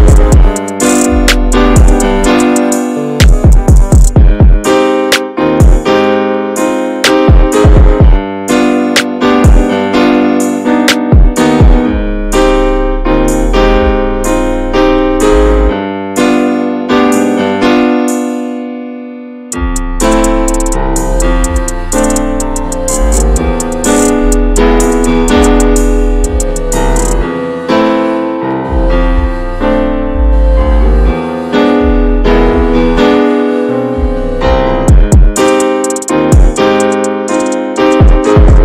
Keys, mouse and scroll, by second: 1.2 scroll up 1, 1.4 shift+middle click, 1.7 f, 3.4 scroll down 2, 3.5 middle click, 4.0 alt+shift+middle click, 4.4 scroll up 1, 4.7-6.1 shift+middle drag, 6.1-10.6 drag, 10.6 middle click, 11.3 click, 12.0 middle click, 12.1 click, 12.6 middle click, 12.9 click, 13.2 shift+middle click, 13.4 scroll up 1, 13.4 click, 13.7 middle click, 13.9 click, 14.2 shift+middle click, 14.5 click, 15.2 shift+middle click, 15.6-16.6 drag, 16.6 shift+middle click, 16.9 click, 17.4 middle click, 17.7-18.7 drag, 18.7 middle click, 18.9 click, 19.5 shift+middle click, 19.9 click, 20.5 shift+middle click, 21.0 scroll down 2, 21.0 middle click, 21.2 click, 21.5 shift+middle click, 21.7-23.9 drag, 23.9 middle click, 24.1 scroll down 2, 24.2 shift+middle click, 24.6 scroll up 1, 24.7 middle click, 25.2 scroll up 1, 25.3 scroll down 3, 25.3-26.8 shift+middle drag, 26.8 click, 26.8 scroll down 1, 27.0 middle click, 27.1 scroll up 2, 27.3 click, 27.5 click, 27.7 shift+middle click, 28.3-28.7 drag, 28.9 shift+middle click, 29.0 scroll down 2, 29.1-30.1 shift+middle drag, 30.1 ctrl+s, 30.5 click, 30.7 shift+click, 30.9 shift+click, 31.6 ctrl+j, 31.9-32.4 middle drag, 32.4 shift+h, 32.6-33.0 middle drag, 33.0 click, 33.4 alt+shift+middle click, 33.9 scroll down 2, 34.0 shift+middle click, 34.9 click, 35.2 shift+middle click, 35.5 click, 35.9 shift+middle click, 36.2 click, 36.5 middle click, 37.2 click, 38.0 middle click, 38.3 scroll up 2, 38.4 middle click, 38.5 scroll down 7.